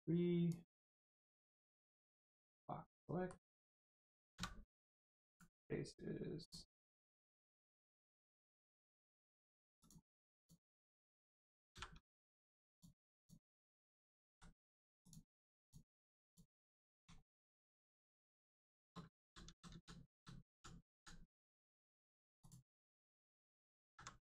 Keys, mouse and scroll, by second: 0.5 click, 2.9 middle click, 5.3 click, 9.1 x, 9.7 click, 11.7 v, 12.7 click, 14.3 x, 15.0 click, 16.7 middle click, 17.1 shift+middle click, 17.9 middle click, 17.9 middle click, 18.7 shift+middle click, 19.0 ctrl+middle click, 19.1 ctrl+z, 21.4 middle click, 22.3 click, 22.6 middle click, 23.8 alt+z, 24.1 middle click.